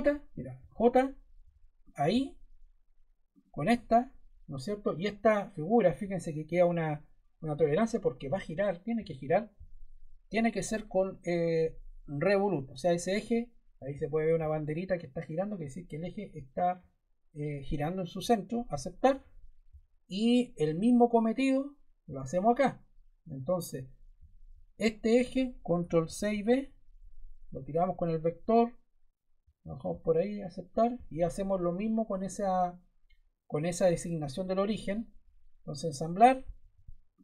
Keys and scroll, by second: 0.5 j, 25.7 super+Caps_Lock, 25.9 super+c, 26.2 super+v.